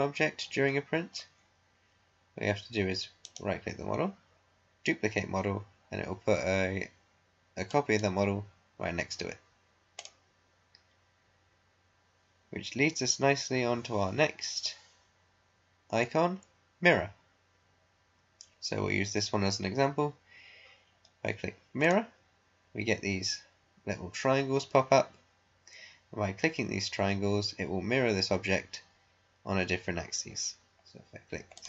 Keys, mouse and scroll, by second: 0.1 scroll up 1, 0.9 scroll down 1, 3.3 right click, 7.6 click, 10.3 click, 21.7 click, 31.5 click.